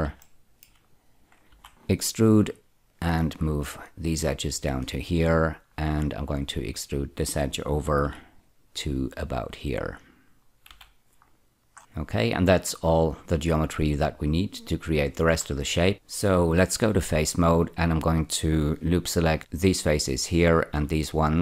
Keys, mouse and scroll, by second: 0.2 shift+middle click, 1.4 4, 2.5 right click, 2.9-4.7 drag, 5.6-6.8 scroll up 2, 6.8 click, 7.9 4, 8.1 right click, 8.5-10.0 drag, 10.0-10.6 scroll down 6, 10.6 z, 11.2-12.3 scroll down 2, 15.4-15.9 scroll up 1, 15.9 2, 16.8 3, 19.4 ä, 20.7 ä.